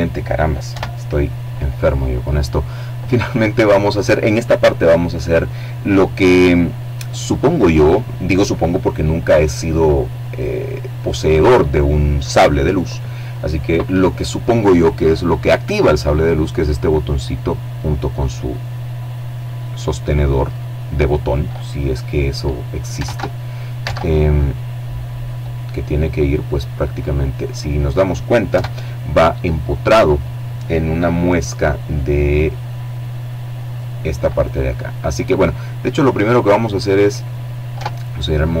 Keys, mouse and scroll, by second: 21.5 alt+Tab, 22.2 alt+Tab, 23.5 click, 23.8-26.1 middle drag, 26.8 KP_7, 30.8 middle click, 32.6 right click, 33.3-34.8 middle drag, 36.0 Tab, 37.2-38.6 middle drag.